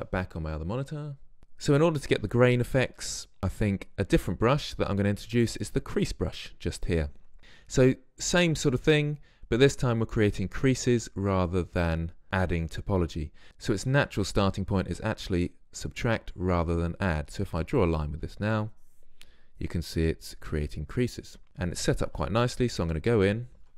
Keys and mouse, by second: 3.6-8.1 drag, 18.9-21.4 drag, 21.4-22.4 middle drag.